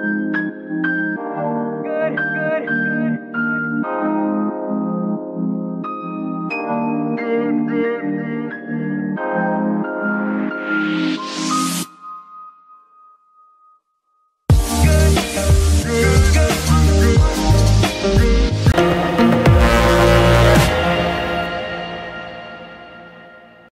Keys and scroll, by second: 1.1 g, 4.1 shift+g, 7.9 Escape, 14.6 ctrl+s, 18.1 ctrl+shift+s.